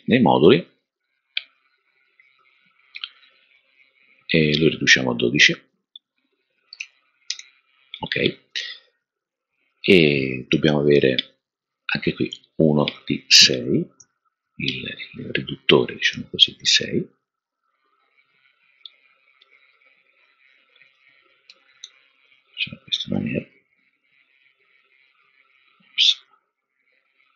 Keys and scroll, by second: 6.5-7.2 typing, 13.9 super+d, 17.0 super+d, 21.8 typing, 25.0 typing.